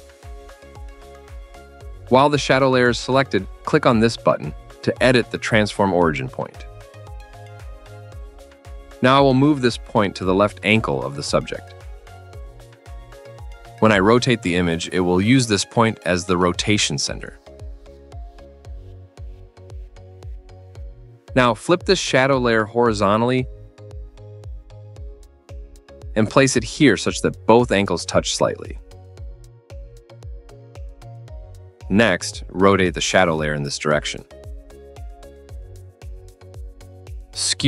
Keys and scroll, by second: 20.9 ctrl+z.